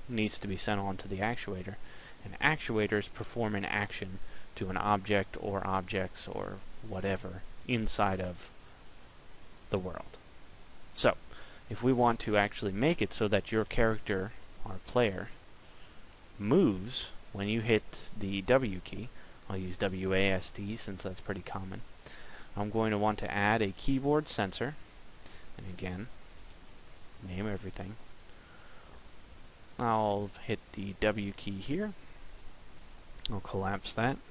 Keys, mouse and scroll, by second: 14.6 middle click, 22.6 click.